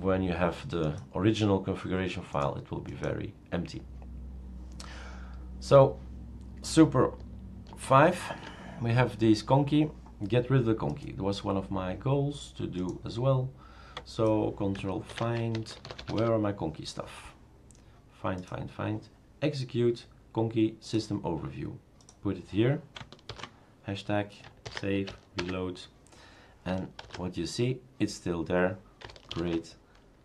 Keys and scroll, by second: 7.7 super+(, 15.1 ctrl+f, 15.3-16.7 typing, 23.5 shift+3, 24.7 ctrl+s, 25.4 shift+super+r, 27.0 super+', 29.3 ctrl+alt+t.